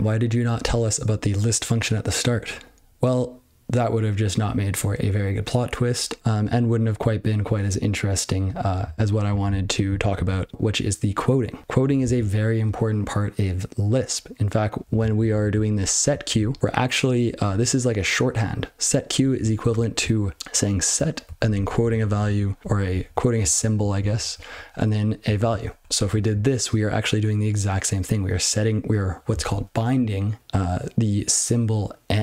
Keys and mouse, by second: 9.2 ctrl+n, 9.4-9.8 ctrl+n, 10.1 ctrl+n, 10.5 ctrl+l, 11.6 ctrl+l, 15.1 ctrl+n, 15.4 ctrl+n, 15.5 ctrl+f, 15.7 ctrl+f, 16.1 ctrl+f, 16.3 ctrl+f, 16.5 ctrl+f, 19.4-19.7 ctrl+n, 19.8 ctrl+n, 20.4 ctrl+b, 20.7 ctrl+f, 20.9 ctrl+f, 21.2 ctrl+f, 21.4 ctrl+f, 21.6 ctrl+f, 21.8 ctrl+f, 22.0 ctrl+f, 22.2 ctrl+f, 22.6 ctrl+b, 22.8 ctrl+b, 22.8 ctrl+b, 23.0 ctrl+b, 23.5 ctrl+f, 23.7 ctrl+f, 23.7 ctrl+f, 23.9 ctrl+f, 24.2 ctrl+f, 24.4 ctrl+f, 25.2 ctrl+f, 25.4 ctrl+f, 25.8 ctrl+e.